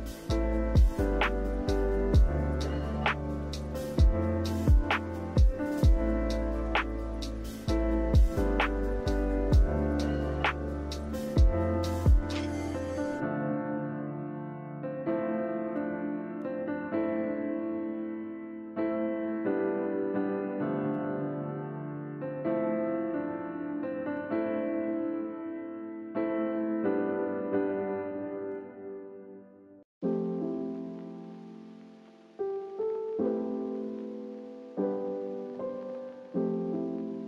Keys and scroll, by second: 30.5 5, 30.6 Return.